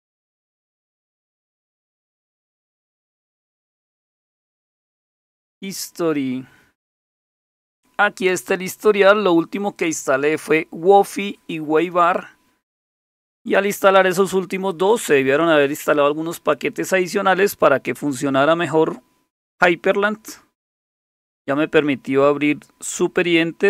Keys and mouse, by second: 0.0-5.2 typing, 5.5 Return.